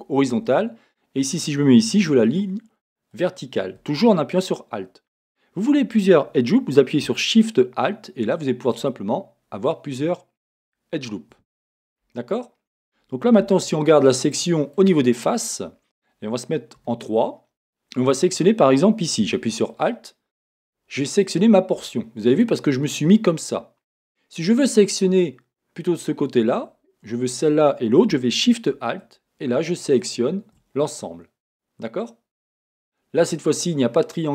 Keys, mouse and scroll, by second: 0.5 a, 3.1 alt+click, 8.7 alt+shift+click, 10.5 alt+shift+click, 11.6-12.3 scroll down 1, 13.4 a, 14.2-19.7 middle drag, 16.8 3, 19.9-21.2 drag, 21.2-29.0 middle drag, 29.0 alt+shift+click, 29.8 alt+shift+click, 30.8-34.3 middle drag.